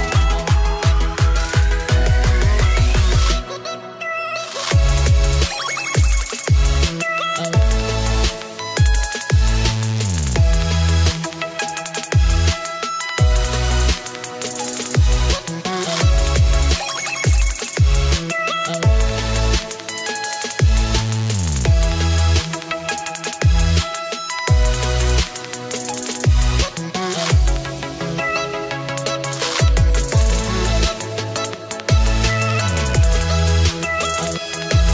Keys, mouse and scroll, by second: 2.6-3.1 scroll down 2, 3.1 middle click, 10.6 click, 13.4 click, 15.5 click, 20.9 click, 21.7 middle click, 22.5 middle click, 22.5 scroll up 2, 24.9-25.3 scroll down 11, 26.7 scroll down 1, 26.8 click, 27.4 click, 28.4 click, 28.9 click, 29.5 click, 30.6 click, 30.7 middle click, 32.2 middle click, 32.2-33.2 scroll up 8, 33.2 click, 34.3 click.